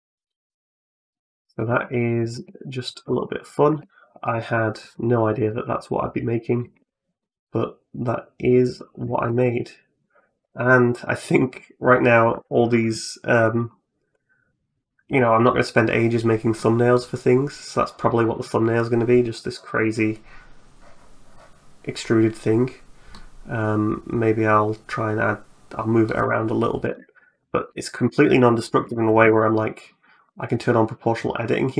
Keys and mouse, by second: 0.2-3.5 typing, 4.8 middle click, 5.3-6.4 middle drag, 6.6 Tab, 7.0-8.6 middle drag, 8.9 shift+click, 9.2 middle click, 10.5 middle click, 11.4 middle click, 13.5-15.3 middle drag, 16.4 middle click, 22.9-25.9 middle drag, 26.7 Tab, 27.4 right click, 27.7 shift+click, 28.7 o, 29.0 g.